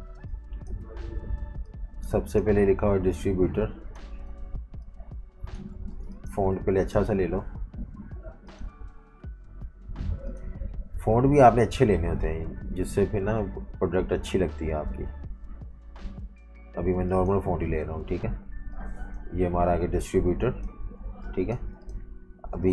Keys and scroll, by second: 0.0-1.2 typing, 5.6-6.4 typing, 21.0 typing, 22.5 space.